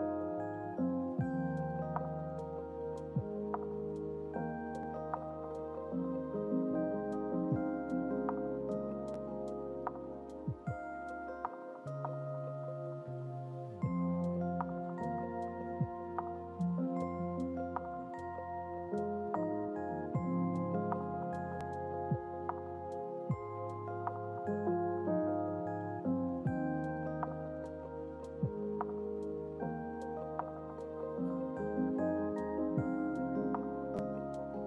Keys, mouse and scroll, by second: 6.0 click, 7.3-9.7 drag, 13.2-15.4 drag, 17.4-18.2 drag, 19.2 click, 19.9 click, 20.8 click, 21.8 click, 23.1 click, 23.9 click, 24.4 click, 25.1 click, 26.2-28.8 drag.